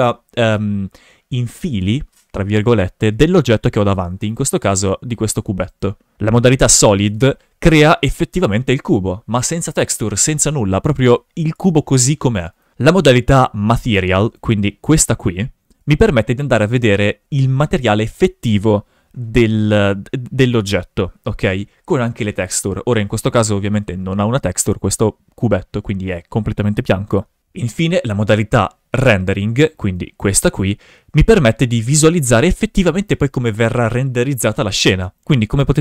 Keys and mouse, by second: 4.8 right click, 5.1 g, 5.7 right click, 6.4 click, 6.9 shift+f, 14.6 click, 15.9 shift+f, 29.9-31.0 drag, 31.1 shift+f, 35.0 right click, 35.2 g.